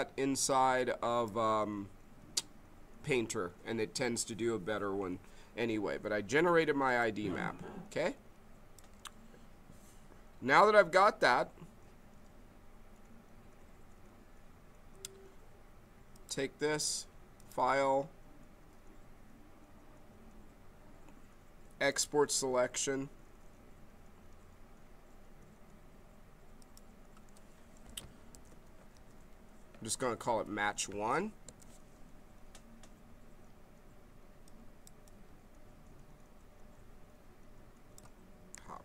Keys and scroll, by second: 28.1-30.3 typing, 31.4 Return, 38.5 ctrl+c.